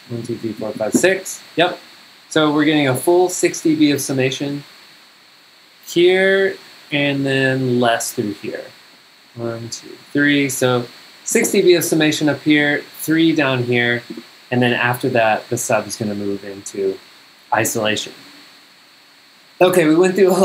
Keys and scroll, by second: 0.1 super+Down, 9.3 super+Up.